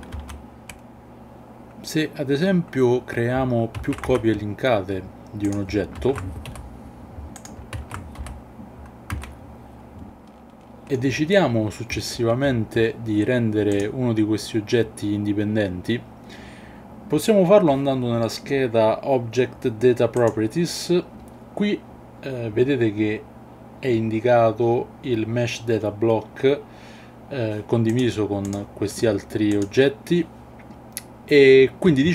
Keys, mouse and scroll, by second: 0.2 ctrl+z, 3.8 alt+d, 4.1 x, 6.0 alt+d, 6.5 y, 7.8 alt+d, 8.2 y, 9.1 x, 9.8 shift+middle click, 10.8 shift+middle click, 13.7 click, 29.5 click.